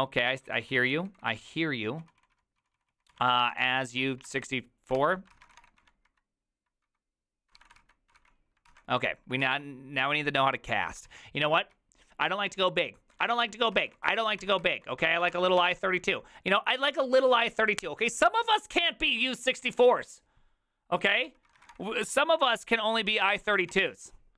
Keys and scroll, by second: 0.0-10.0 typing, 5.0 ctrl+c, 11.2 alt+{, 11.8-16.1 typing, 15.3 ctrl+c, 21.3 ctrl+c, 21.4-22.2 typing, 23.3 ctrl+c, 23.3-24.1 typing.